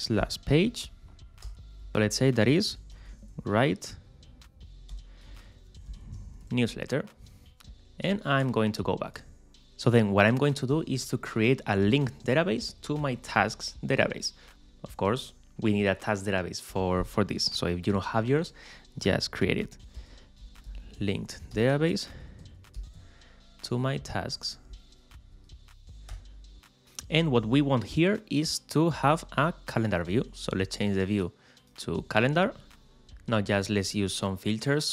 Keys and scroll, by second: 0.2 shift+p, 2.4-3.4 typing, 5.1-5.9 typing, 19.9 shift+7, 20.4 shift+l.